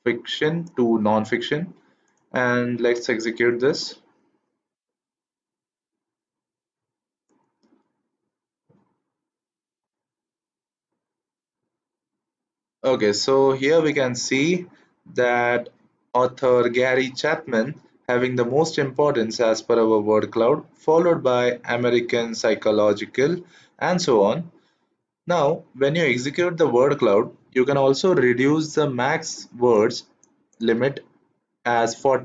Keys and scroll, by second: 2.8 shift+Return.